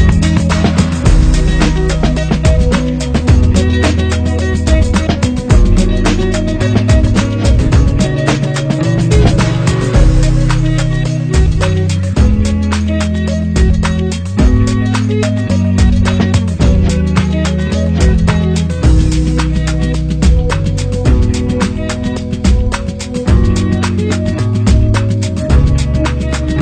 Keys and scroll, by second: 3.1 ctrl+-, 3.6 ctrl+0, 5.3 ctrl+0, 5.4 ctrl+-, 7.4 ctrl+-, 17.6 ctrl+z, 23.8 ctrl+0, 26.2 ctrl+0.